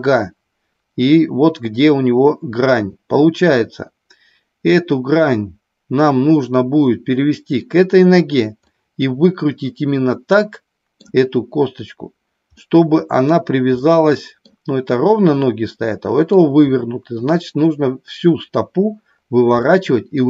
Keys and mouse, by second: 2.6 click, 8.8-11.0 middle drag, 12.5 middle click, 13.7 middle click, 15.4 middle click, 19.5 middle click.